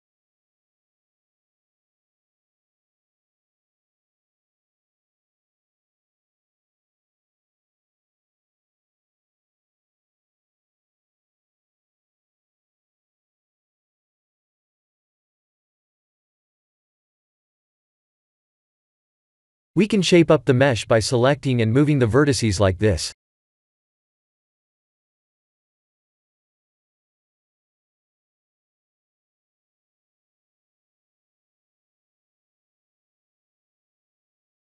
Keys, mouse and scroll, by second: 1.9 Tab, 2.4 Tab, 2.6 2, 3.0 click, 4.1 e, 9.0 1, 9.6 click, 10.3 click, 14.0 click, 15.2 click, 17.8 click, 19.3 click, 19.8 b, 20.8 g, 25.3 ctrl+r, 32.1 ctrl+z, 32.7 ctrl+r.